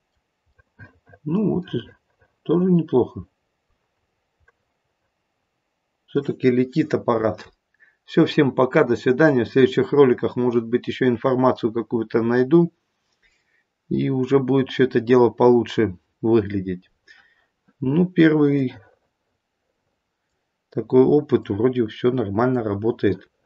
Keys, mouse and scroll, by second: 1.0 middle click, 1.8 middle click, 3.9 scroll up 3, 4.6 middle click, 18.5 middle click, 21.4 middle click.